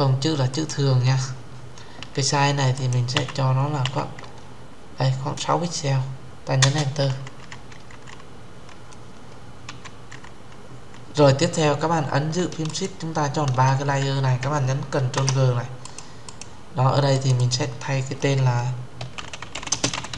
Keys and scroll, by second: 6.3 Return, 14.7 ctrl+g.